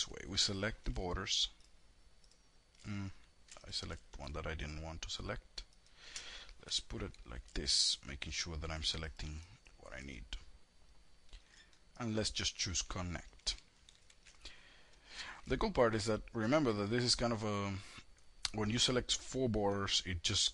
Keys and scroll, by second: 5.6 F3, 12.8 ctrl+shift+e.